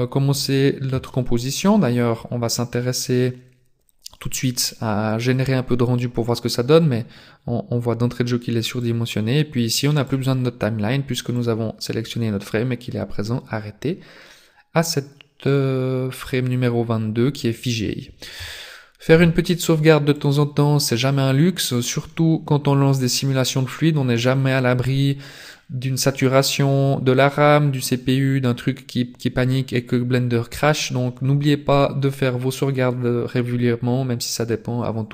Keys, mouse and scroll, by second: 0.1-0.7 scroll down 3, 1.0 shift+middle click, 8.8 click, 11.4 click, 19.1 ctrl+s.